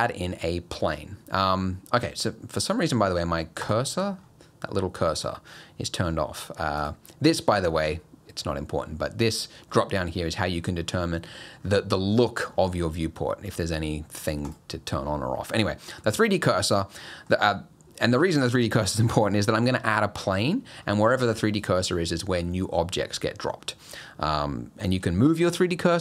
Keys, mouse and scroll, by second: 2.5 click, 4.2 scroll up 3, 5.1 middle click, 6.8 click, 9.2 click, 10.9-11.7 scroll down 14, 12.5-12.9 scroll up 8, 13.5 click, 14.4 click, 15.5-15.9 scroll up 8, 16.2 scroll down 3, 16.7 middle click, 17.0 middle click, 23.4 scroll down 1, 23.7 middle click.